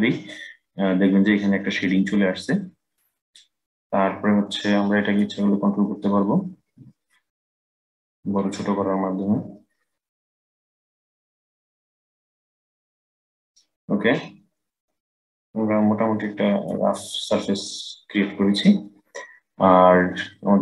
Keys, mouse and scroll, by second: 4.9-7.9 drag.